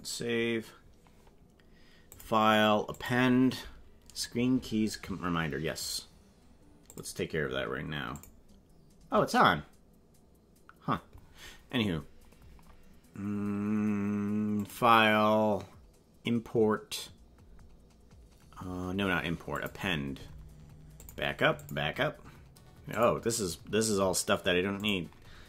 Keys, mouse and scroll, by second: 2.0-3.2 drag, 8.1 click, 14.5-19.7 drag.